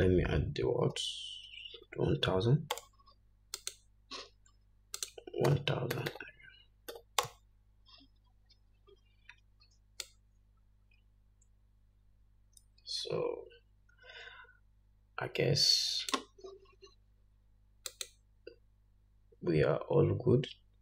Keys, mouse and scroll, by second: 2.3-6.5 drag, 4.5 0, 7.8-20.8 drag, 8.9 0.